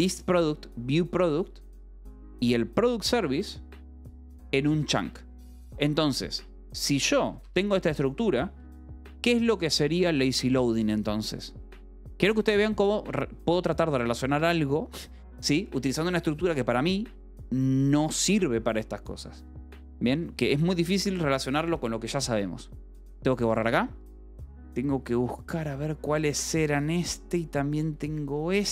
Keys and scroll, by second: 0.4 j, 2.2 Escape, 2.8 j, 3.7 k, 4.4 shift+v, 5.2 Escape, 6.8 k, 7.3 j, 7.9 k, 8.7 j, 23.9 d, 24.6 j, 26.7 d.